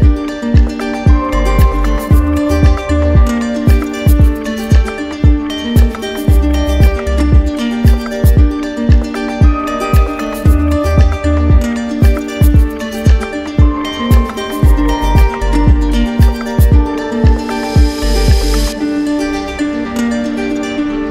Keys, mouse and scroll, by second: 0.2 alt+right click, 0.5 shift+right click, 1.2 alt+right click, 3.6 w, 6.2 click, 7.4 right click, 9.6 click, 10.4 right click, 12.9 click, 13.7 click, 14.5 right click, 15.1 shift+right click, 16.6 right click, 16.8 click, 18.3 q, 20.3 ctrl+d.